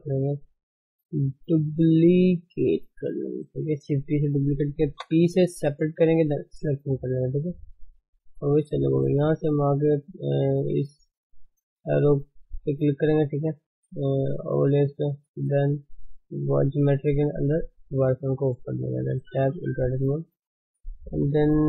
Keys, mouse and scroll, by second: 1.2 shift+d, 5.1 p, 7.2 Tab, 7.6 click, 9.1-11.1 drag, 14.9-18.1 drag, 18.7 Tab, 20.7 a, 21.4 click.